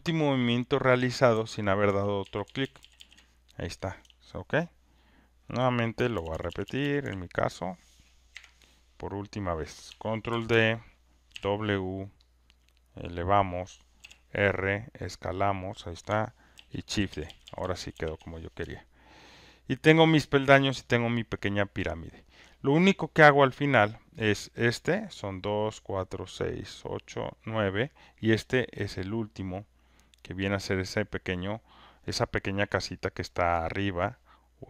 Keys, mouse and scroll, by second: 1.9-3.3 typing, 5.9-7.1 typing, 8.1 click, 8.3 Delete, 9.1 click, 10.3 ctrl+d, 11.3 w, 13.5 click, 15.7 click, 15.7-17.9 typing, 19.1 alt+right click, 19.4 alt+middle click, 22.2 alt+click, 29.4 click, 30.9 click, 33.4 click.